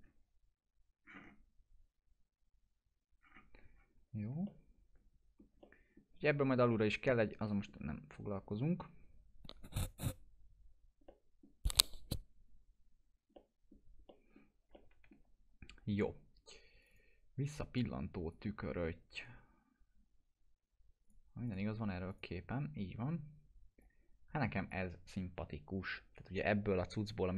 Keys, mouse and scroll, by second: 1.1-1.5 scroll up 1, 3.2-3.6 scroll down 1, 4.4 scroll down 1, 4.5-5.4 alt+middle click, 5.6-6.2 middle drag, 11.1-11.7 middle drag, 14.8-15.4 alt+middle drag, 16.8-18.4 drag, 21.0-24.7 drag.